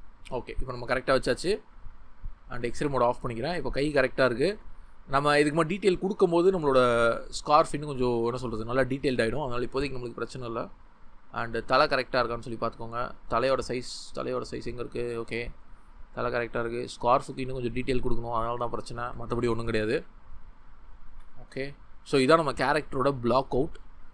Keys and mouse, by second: 0.1 Tab, 6.3 middle drag, 14.7 click, 14.8-15.1 shift+middle drag.